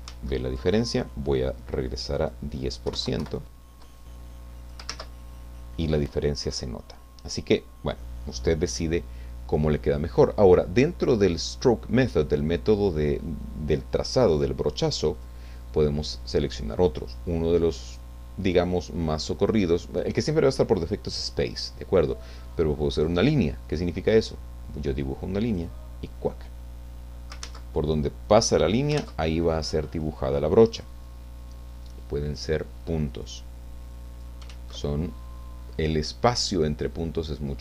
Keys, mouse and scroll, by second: 0.1 ctrl+z, 2.1 click, 2.6-3.4 typing, 4.0 click, 4.9 ctrl+z, 15.1 click, 22.9 click, 24.2-25.7 drag, 27.7 ctrl+z, 28.2 click, 29.0 ctrl+z, 30.7 click, 32.2 click, 33.1-34.4 drag, 34.5 ctrl+z.